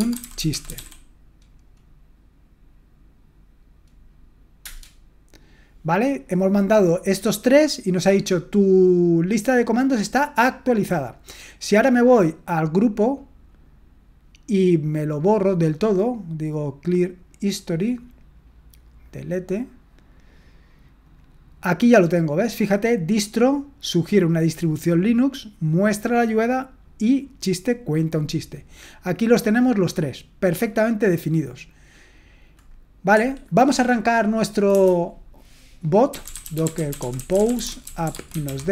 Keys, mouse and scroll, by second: 0.0-1.2 typing, 33.1 Escape, 33.1-34.7 drag, 34.7 BackSpace, 36.1-38.7 typing.